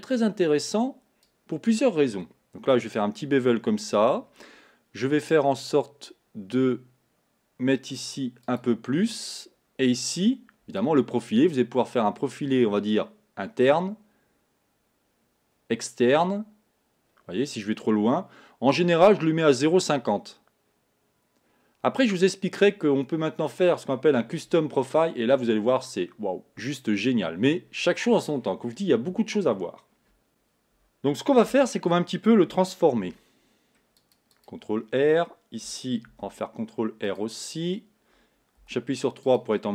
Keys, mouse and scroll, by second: 1.2-4.3 drag, 8.1-9.5 drag, 10.8-13.8 drag, 31.5 Tab, 33.0 ctrl+r, 36.1 ctrl+r, 38.7 3, 39.3 click.